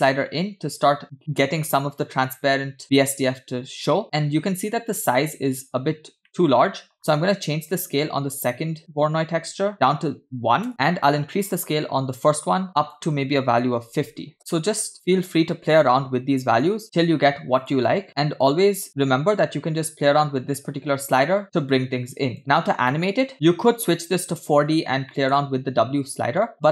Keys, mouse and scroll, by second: 6.6 middle click, 7.1 scroll up 2, 7.7-10.7 drag, 10.6 BackSpace, 11.5-12.7 drag, 12.9-14.9 drag, 15.2-16.7 drag, 17.6 click, 18.4-22.4 drag, 23.2 middle click, 23.3-24.6 drag, 23.3 scroll down 2, 25.4 middle click.